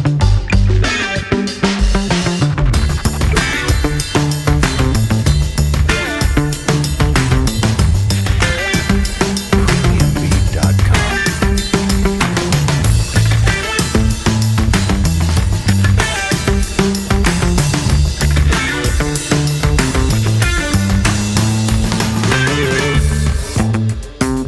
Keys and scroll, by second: 1.6 F3, 2.2 F3, 3.9 ctrl+t, 8.3 alt+F4, 8.7 ctrl+t, 9.2 2, 9.4 F4, 9.8 2, 13.8 F4, 15.4 F4, 16.2 r, 17.4 w, 17.7 z, 17.9 F4, 18.5 w, 20.3 ctrl+t, 20.6 5, 23.2 space.